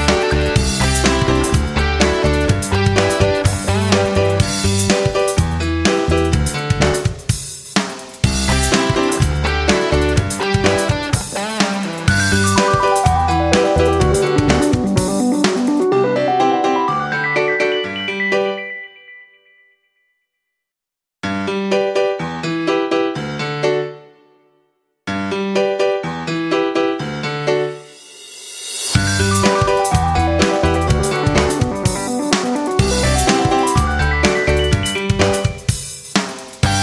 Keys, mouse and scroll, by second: 1.2 Left, 1.3 Left, 1.6 Up, 1.8 Up, 2.0 Up, 2.1 Left, 2.3 Left, 4.8-15.9 drag, 16.0-17.2 drag, 17.8 Left, 20.8-27.2 drag, 27.2 Up, 27.4 Left, 27.6 Up, 27.6 Left, 27.9 Up, 27.9 Left, 28.5 Down, 30.2 Right, 32.0-36.8 drag.